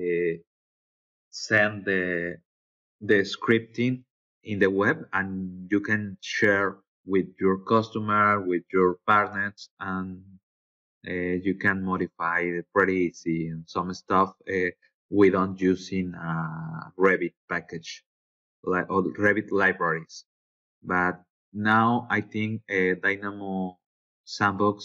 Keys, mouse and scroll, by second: 3.3 click, 9.8 click, 21.0 click, 22.7 click.